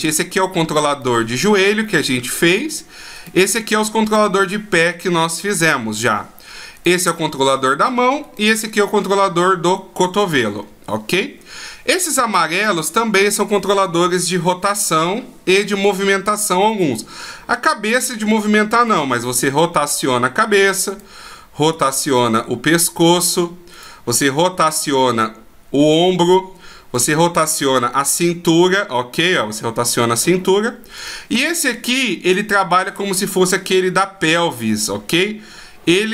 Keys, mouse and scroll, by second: 1.2 right click, 3.3 right click, 4.2 right click, 5.2 middle click, 6.9 right click, 8.4 right click, 10.4-10.8 shift+scroll up 1, 11.4 scroll up 1, 12.4 right click, 21.0 right click, 21.9 r, 23.9 right click, 24.5 r, 27.1 right click, 27.8 r, 31.1 right click, 32.4 middle click, 33.8 r.